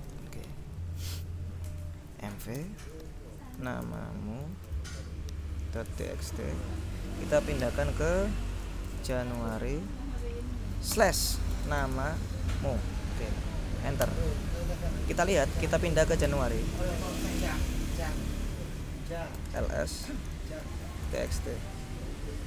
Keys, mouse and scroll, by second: 2.2-5.6 typing, 5.9 Tab, 8.8-9.8 typing, 11.0-12.4 typing, 14.2 Return, 15.7-17.9 typing, 18.1 shift+Return, 19.3-21.9 typing, 22.0 shift+Left.